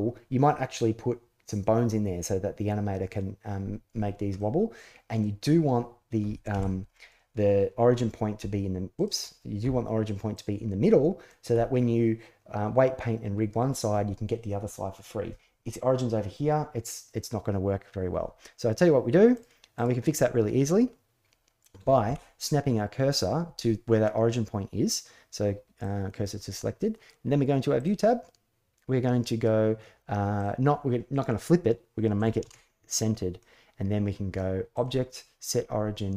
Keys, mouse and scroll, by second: 4.1-5.0 middle drag, 6.3 KP_1, 8.1-11.8 typing, 8.7 click, 10.1 click, 18.0 click, 19.1 click, 19.5 click, 21.8 shift+s, 30.2-32.7 drag, 34.5-36.1 drag.